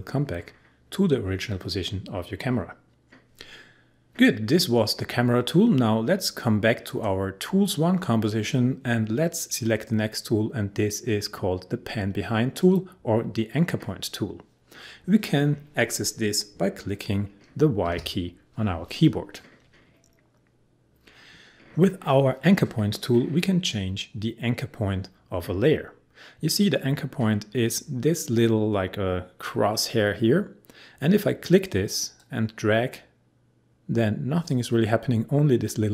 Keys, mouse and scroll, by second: 6.9 click, 17.9 y, 26.7-28.5 scroll up 1, 32.2-35.9 drag.